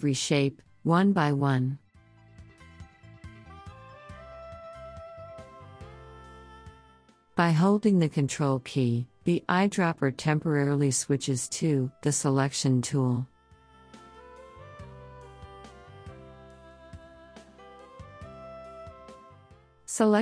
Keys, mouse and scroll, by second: 0.8 ctrl+click, 6.7 ctrl+click, 8.9 ctrl+click, 12.5-20.2 ctrl+drag.